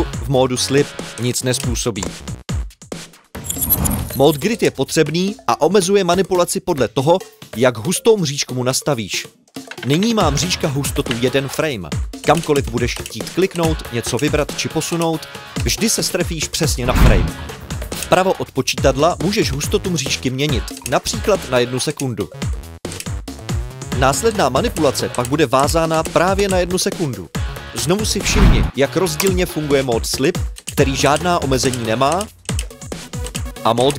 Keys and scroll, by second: 3.4 Delete, 3.6 Delete, 4.2 Delete.